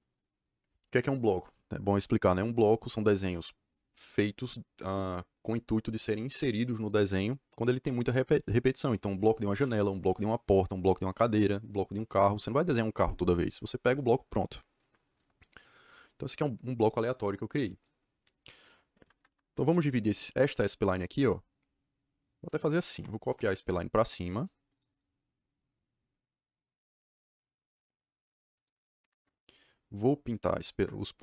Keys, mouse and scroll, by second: 18.9 Escape, 22.6-23.5 typing, 24.3 click, 24.7 right click, 24.8 click, 28.5 click, 28.9 Escape, 29.1 Escape, 30.3 click, 30.7 Escape.